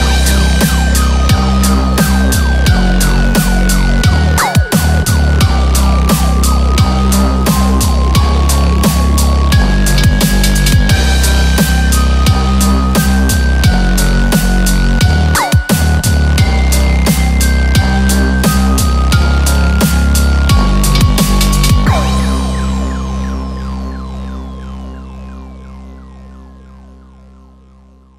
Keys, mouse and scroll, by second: 4.0 click, 4.6 g, 10.9 click, 11.1 z, 11.9 s.